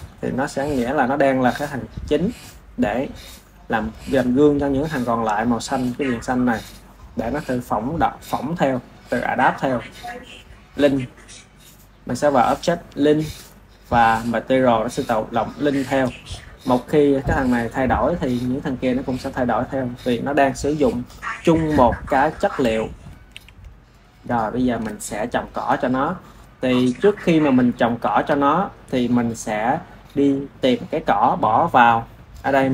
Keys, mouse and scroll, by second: 9.0-12.2 drag, 15.9-18.5 drag, 23.2 ctrl+z, 23.6 click, 24.3-26.2 shift+middle drag, 26.2-27.2 drag, 27.2-27.8 ctrl+middle drag, 27.8 ctrl+s.